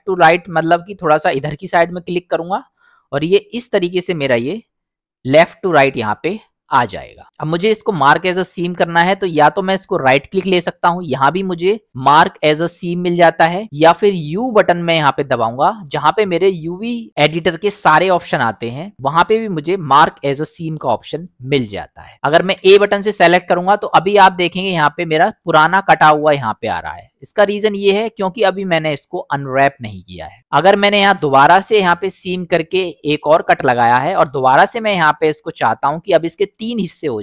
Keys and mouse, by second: 2.4 alt+click, 3.3-6.4 middle drag, 10.1-13.5 right drag, 14.7 u, 22.6 a, 24.2 middle click, 25.1 middle click, 31.5 middle click, 34.4 middle click, 36.3 middle click.